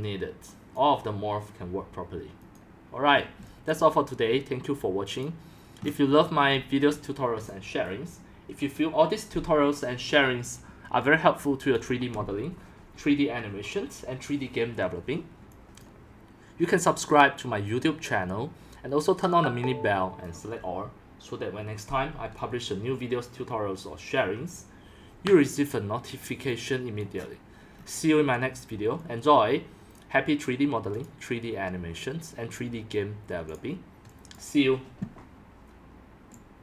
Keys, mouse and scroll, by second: 0.0-0.7 scroll up 5, 0.7-2.0 drag, 2.4 click, 3.2 middle click, 3.3-3.7 scroll up 4, 3.4 c, 3.7-5.9 drag, 5.9 scroll up 4, 6.2 scroll, 6.6 x, 7.0 scroll down 4, 7.0 c, 7.5 click, 11.1-11.7 middle drag, 15.5 click, 17.7-18.5 drag, 21.9-25.4 drag, 25.7 click, 26.0 middle click, 26.1-27.4 scroll down 5, 27.0 click, 27.2 middle click, 27.4-29.2 middle drag, 27.4-27.9 scroll, 29.2 scroll down 4, 30.0-31.0 drag, 35.6 click.